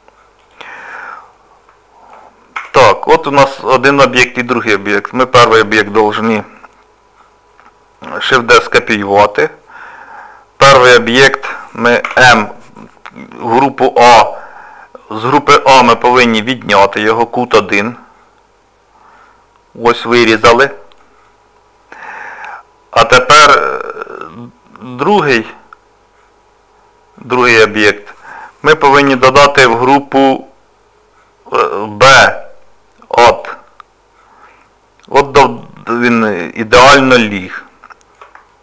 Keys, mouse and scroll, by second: 0.9 middle click, 2.6 Tab, 3.4 middle click, 4.9-5.7 scroll up 1, 8.3 shift+d, 19.2 middle click, 20.7 shift+middle click, 21.3 middle click, 23.0 click, 34.5 middle click, 37.1 middle click, 38.5 shift+middle click.